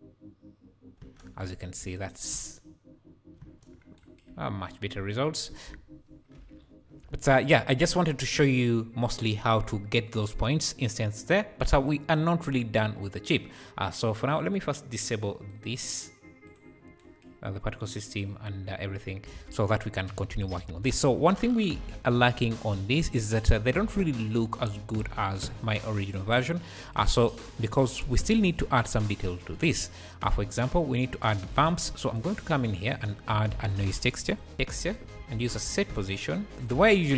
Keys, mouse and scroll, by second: 1.0 space, 2.0-2.4 shift+right drag, 2.4 space, 3.5 space, 3.8 scroll down 3, 4.5 `, 4.8 scroll down 1, 5.9 `, 7.1-8.5 scroll up 5, 8.5-9.5 scroll up 3, 9.5-11.3 scroll down 1, 11.3 scroll down 4, 14.3 click, 15.5-15.9 drag, 16.4 click, 18.1 click, 19.0-19.3 scroll up 2, 19.3 alt+a, 20.0 click, 20.3 `, 21.8 KP_Decimal, 22.4-22.8 scroll up 6, 26.4-26.7 scroll up 1, 27.2 `, 31.9-33.5 drag, 33.5 shift+a, 34.2 click, 34.5 BackSpace, 35.1 shift+a, 36.5-37.1 drag, 36.5 scroll down 2.